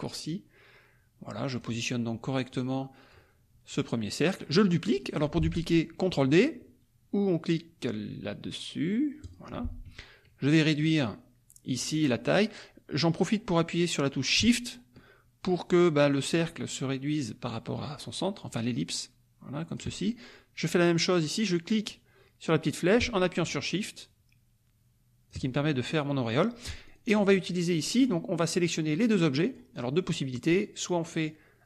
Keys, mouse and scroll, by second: 2.5 click, 9.2 click, 10.6-19.9 drag, 21.8-25.4 drag, 26.9 shift+click, 28.0 click, 28.5-30.0 drag, 31.0-31.6 drag.